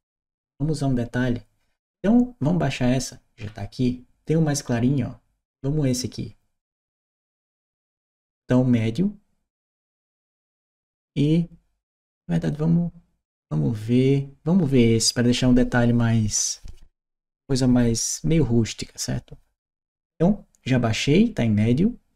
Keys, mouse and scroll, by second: 3.2-4.0 scroll down 1, 4.0-7.0 scroll down 1, 7.0 click, 12.2 click.